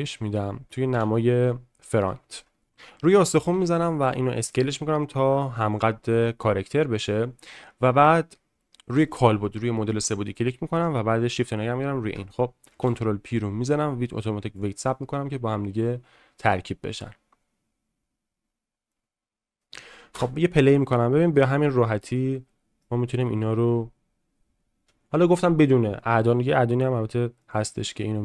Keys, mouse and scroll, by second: 0.9 KP_1, 2.0-2.4 shift+middle drag, 3.5 s, 8.9 click, 12.8 ctrl+p, 20.1 space, 20.7-22.9 middle drag.